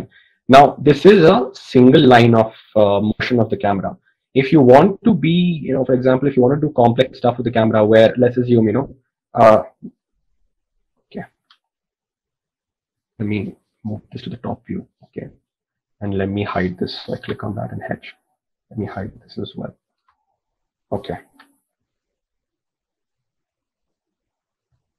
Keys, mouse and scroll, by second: 14.7 KP_7, 17.9 h, 21.3 h.